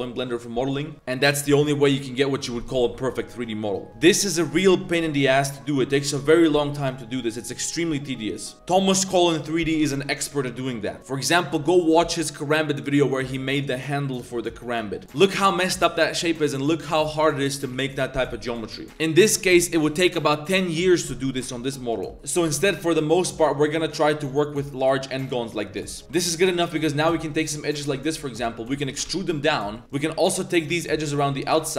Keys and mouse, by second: 11.0 click, 15.0 click, 16.4 click, 17.0 middle click, 17.5 click, 17.7 middle click, 18.7 middle click, 22.1-22.6 typing, 23.7 3, 26.0 a, 26.3 alt+click, 26.7 alt+shift+click, 27.3 alt+shift+click, 27.8 alt+shift+click, 28.2 click, 28.8 e, 28.9 g, 29.8 alt+c, 31.5 alt+shift+click.